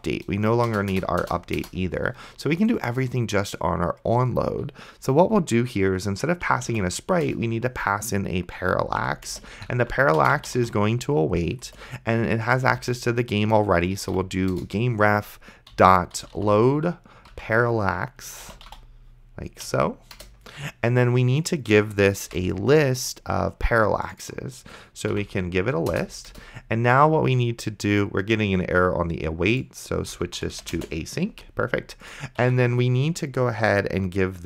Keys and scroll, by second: 6.6 a, 7.0 r, 7.3 Return, 8.8-14.3 typing, 14.5 Return, 15.5-17.2 typing, 18.3-19.3 typing, 19.7 Down, 20.2 Return, 22.3 ;, 25.1 [, 25.9 BackSpace, 26.3 Return, 29.7-31.1 typing, 32.4 Tab.